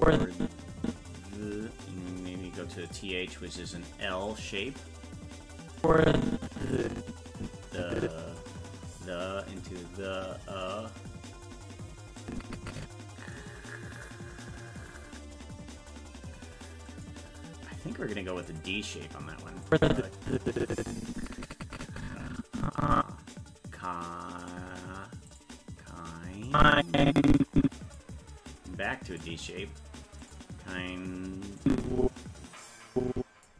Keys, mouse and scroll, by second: 2.9 click, 4.3 click, 5.8-8.4 drag, 9.6 click, 10.5 click, 12.2-13.4 drag, 16.9 click, 18.5 click, 19.7-23.4 drag, 24.4 click, 25.3 click, 26.5-28.0 drag, 29.1 click, 30.2 click, 31.6-33.5 drag.